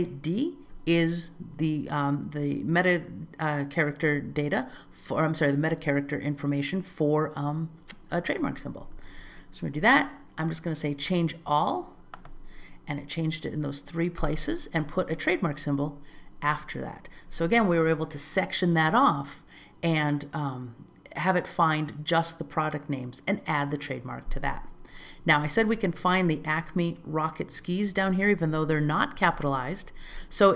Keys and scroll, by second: 9.0 alt+z.